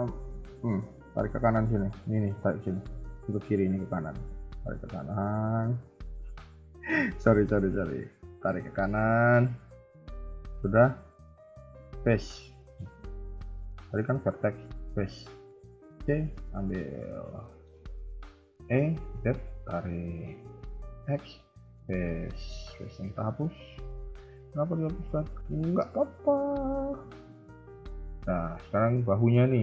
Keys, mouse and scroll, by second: 6.2 shift+middle click, 6.6 middle click, 7.4 KP_3, 7.5 KP_1, 8.0 middle click, 8.8 middle click, 8.9 shift+middle click, 10.2 click, 11.0 click, 11.2 shift+middle click, 11.4 shift+middle click, 11.6 scroll up 1, 11.9 c, 13.5 click, 14.6 click, 15.2 c, 16.8 KP_1, 17.1-17.4 scroll down 3, 17.4 shift+middle click, 17.7 scroll up 2, 18.3 e, 19.8 middle click, 20.3 KP_1, 20.9 x, 22.0 middle click, 22.6 KP_3, 23.0 KP_1, 23.4 scroll up 1, 23.5 scroll down 3, 23.9 shift+middle click, 25.7 click, 26.6 click, 27.0 shift+middle click, 28.3 a, 28.5 a.